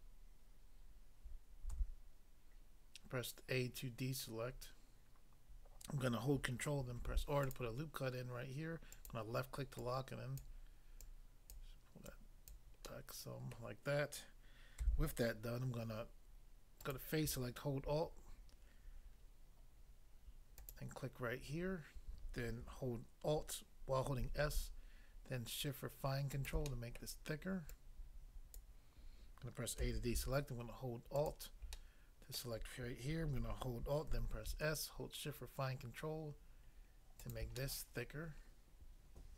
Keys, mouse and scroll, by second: 1.7 a, 7.0 ctrl+r, 7.4 click, 7.5 click, 8.9 click, 9.0 click, 9.7 click, 10.4 click, 11.0 click, 11.6 click, 12.0 click, 12.4 click, 12.9 middle click, 13.5 middle click, 14.8 a, 16.8 click, 20.6 alt+click, 24.2 alt+s, 26.4 shift+click, 26.7 middle click, 27.0 middle click, 27.7 click, 28.5 click, 29.8 a, 31.2 alt+click, 31.3 alt+click, 31.8 middle click, 32.4 middle click, 34.1 alt+s, 37.2 shift+click, 37.6 middle click.